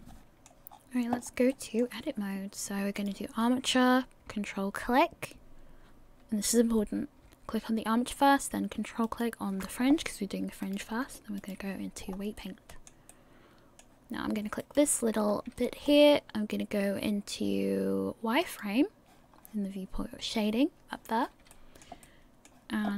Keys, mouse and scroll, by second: 0.2 click, 0.2 middle click, 0.2 scroll down 4, 0.7-1.3 scroll up 8, 1.5 middle click, 3.0 click, 9.0 ctrl+click, 10.6 click, 12.0 scroll up 3, 12.4 middle click, 14.9 right click, 15.3 scroll up 2, 15.6 shift+middle click, 18.4 click, 19.3 scroll up 2, 21.5 shift+middle click, 22.0 middle click.